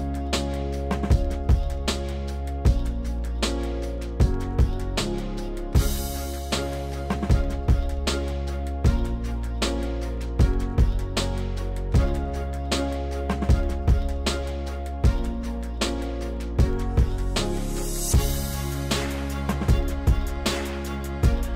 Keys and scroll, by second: 0.0 s, 2.3 ctrl+z, 2.5 ctrl+z, 13.0 ctrl+z.